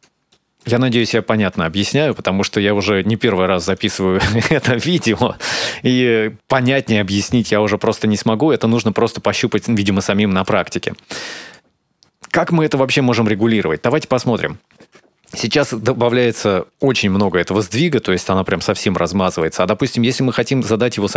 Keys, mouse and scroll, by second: 0.1 middle click, 0.8 ctrl+shift+click, 1.7 middle click, 3.6 click, 7.1 click, 7.6 x, 9.2 middle click, 10.0 click, 10.6 click, 14.0 ctrl+shift+click, 16.0 middle click, 16.6 ctrl+shift+click, 18.7 middle click, 19.6-20.1 scroll up 2.